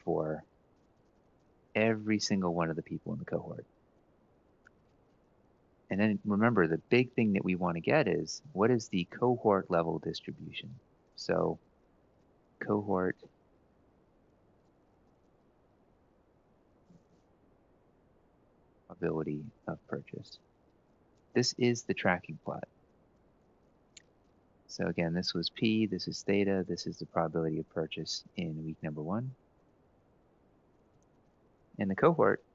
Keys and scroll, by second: 0.1 ctrl+c, 0.6 ctrl+shift+Down, 1.3 ctrl+v, 4.0 Left, 4.2 Left, 5.8 ctrl+Down, 7.8 Down, 8.0 Down, 8.1 Down, 8.3 Down, 10.1 Up, 10.7 Up, 13.7 Left, 14.3-21.3 typing, 23.1 Tab, 25.5 Right, 26.3 Right, 28.7-31.7 typing, 31.7 ctrl+shift+Up, 32.4 shift+Down.